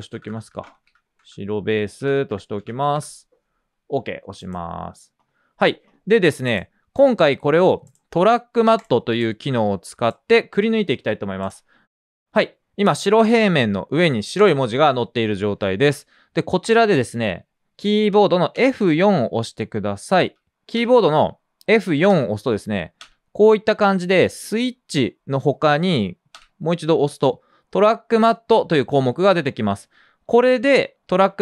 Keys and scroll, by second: 0.0-3.1 typing, 7.6 typing, 10.9 typing, 18.5 F4, 20.2 F4, 20.5 F4, 20.6 typing, 26.2 typing, 27.7 typing.